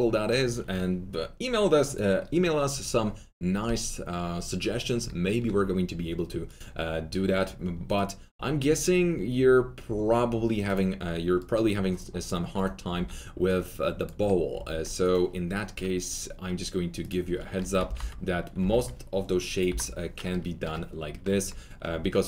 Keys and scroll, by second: 12.9 w, 14.5 w, 17.8 alt+f, 17.9 alt+z, 18.5 alt+4, 19.6 Delete.